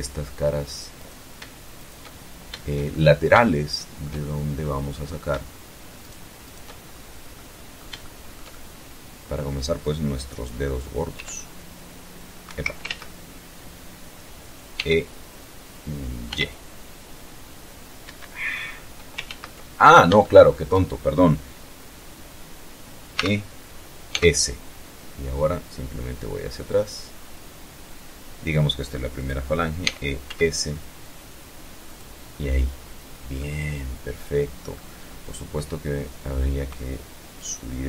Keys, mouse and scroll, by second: 0.1 shift+right click, 1.2-3.1 shift+middle drag, 3.3 scroll up 1, 4.4 shift+right click, 4.8 shift+right click, 5.2-5.6 shift+scroll down 3, 5.7 middle click, 6.2 shift+click, 6.4-7.9 shift+middle drag, 9.5 e, 10.7 Escape, 12.2 scroll up 2, 13.1 e, 14.6 y, 16.4 Escape, 16.7 scroll down 2, 17.6 ctrl+z, 18.2-18.5 ctrl+scroll up 3, 18.5-19.2 shift+middle drag, 21.5 e, 22.4 s, 27.5 click, 28.2 e, 28.5 s, 30.2 click, 31.7-33.2 middle drag, 35.7-37.5 drag.